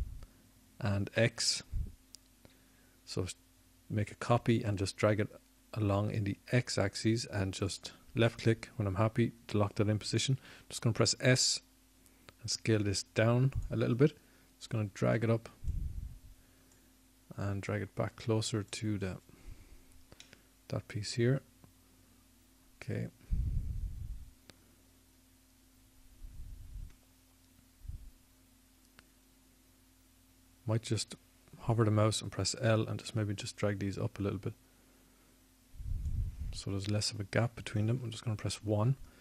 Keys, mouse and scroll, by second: 4.3 shift+d, 15.4 s, 18.8-23.9 drag, 25.6-27.2 middle drag, 36.9 l.